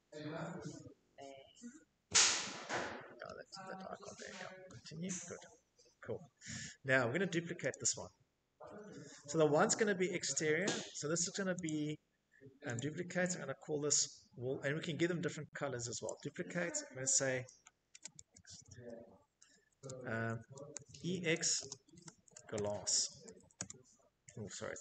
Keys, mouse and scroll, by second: 6.0 click, 6.9 click, 9.9 click, 11.0 click, 12.2 click, 14.3 click, 15.8-22.3 typing.